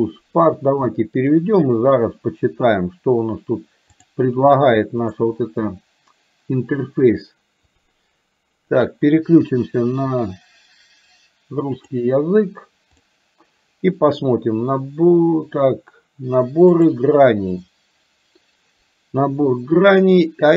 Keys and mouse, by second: 1.2-2.6 drag, 4.2-5.6 drag, 16.7-20.5 drag.